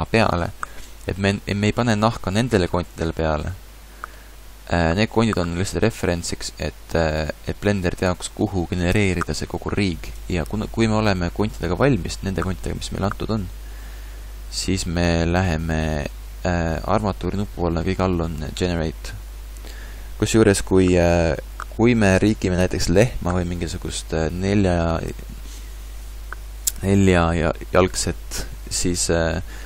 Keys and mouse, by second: 16.8-18.8 drag, 23.9-29.6 middle drag.